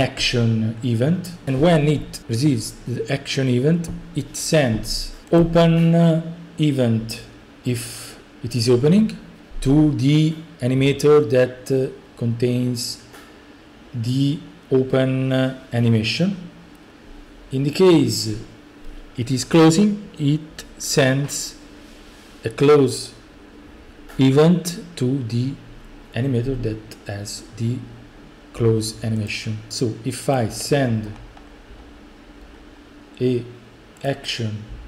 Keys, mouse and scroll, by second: 0.3-1.2 scroll, 5.4 click, 8.3 middle click, 29.3 click, 30.4-31.1 drag, 31.1-33.2 scroll, 34.1 click.